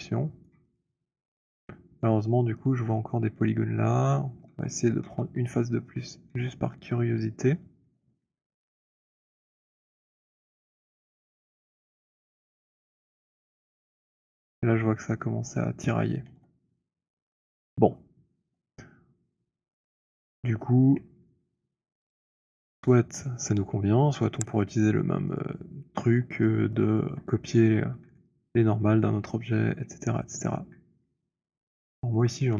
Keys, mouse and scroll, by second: 0.5 right click, 0.9 click, 4.7 z, 5.1 z, 6.4 z, 8.3 shift+., 11.5 shift+right click, 16.4 z, 19.9 right click, 20.3 click, 20.6 middle click, 21.1 middle click, 22.3 alt+click, 25.5 click, 26.6 alt+middle click, 26.9 alt+middle click, 27.1 alt+right click, 28.9 alt+click, 30.3 right click, 32.2 alt+click.